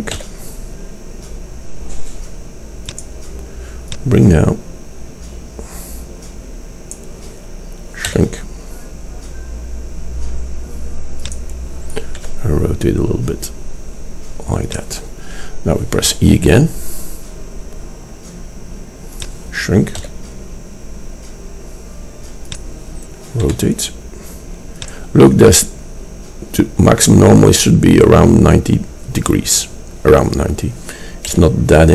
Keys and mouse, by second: 0.2 s, 4.0-5.9 middle drag, 8.1 s, 12.2 r, 16.2 e, 20.0 s, 23.5 r, 31.4 s.